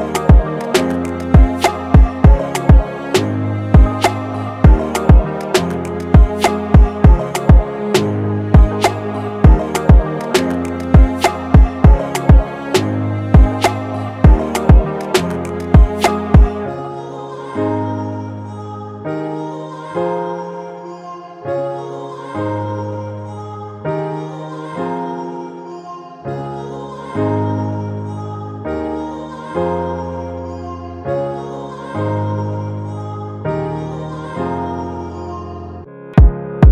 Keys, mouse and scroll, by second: 3.3 double click, 7.1-9.6 typing, 9.0 double click, 9.8 double click, 10.8-11.7 typing, 11.3 double click, 11.9 double click, 13.1 right click, 13.8-14.4 typing, 14.8 double click, 17.1 typing, 17.5 double click, 22.8 right click, 23.8 double click, 31.8 double click, 36.4 shift+click.